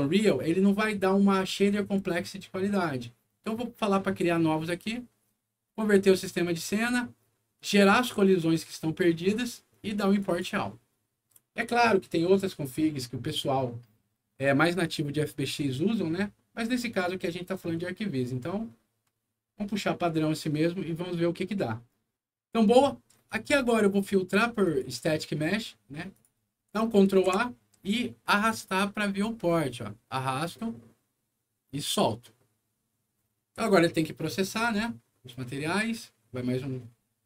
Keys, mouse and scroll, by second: 0.1 click, 10.1 click, 22.9-23.6 scroll up 2, 24.6 click, 26.1 click, 27.0 ctrl+a, 27.8-31.8 ctrl+drag.